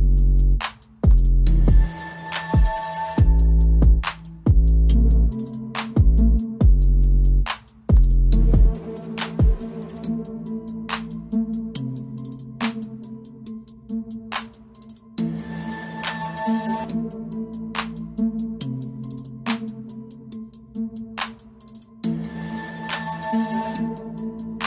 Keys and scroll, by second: 9.4 [, 10.7 ], 11.1 ], 11.4 ], 15.2 [, 16.6 [, 17.2 ], 17.4 ].